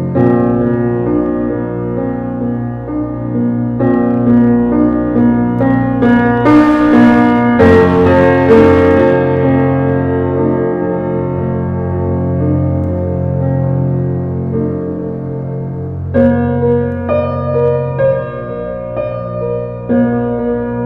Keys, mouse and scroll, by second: 0.3-1.5 middle drag, 1.5 shift+d, 4.1 shift+d, 8.8-9.3 scroll up 2, 10.4 shift+d, 11.9 r, 12.9 shift+d, 14.4 r, 15.3-17.3 middle drag, 17.3 click, 17.7 r, 18.6 click, 19.2 r.